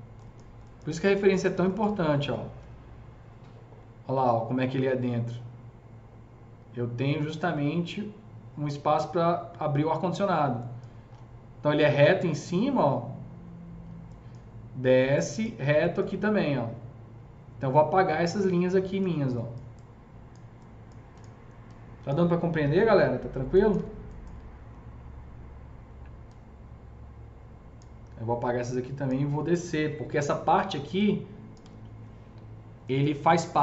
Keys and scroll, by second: 22.5 Delete, 29.8 Delete.